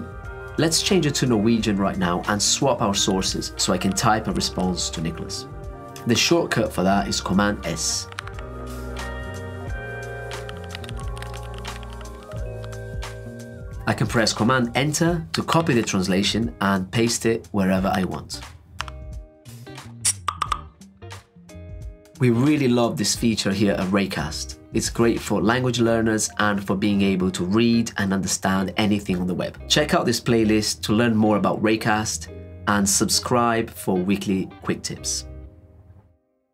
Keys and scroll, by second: 7.8 super+s, 14.9 super+Return.